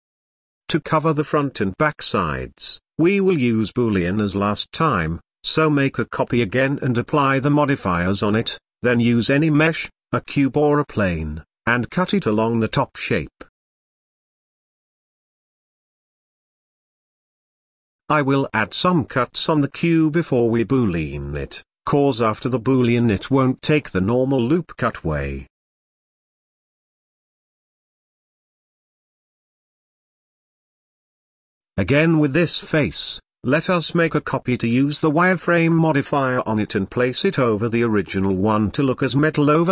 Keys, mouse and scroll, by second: 0.6 drag, 0.9-2.0 middle drag, 1.8 click, 2.8 shift+d, 3.7 click, 3.8-5.9 drag, 6.9-8.0 drag, 9.7 click, 10.0 click, 10.5-11.4 middle drag, 11.4 shift+a, 13.2-13.7 scroll down 2, 13.7 g, 13.8 Tab, 13.9 s, 15.1 scroll down 1, 15.2 middle click, 15.7 s, 17.3 s, 18.0 Tab, 18.2 ctrl+r, 20.1 KP_1, 21.1 z, 21.8-22.3 scroll down 1, 22.3 ctrl+b, 23.4 ctrl+r, 23.9 ctrl+r, 24.8 ctrl+r, 25.5 Tab, 26.0 middle click, 26.3 z, 26.5 click, 26.8 click, 27.1 click, 29.0-29.8 drag, 30.4 x, 30.8-32.3 middle drag, 32.3-33.5 scroll up 5, 33.5-33.8 scroll down 4, 33.9-35.7 shift+middle drag, 35.7 click, 36.7 click.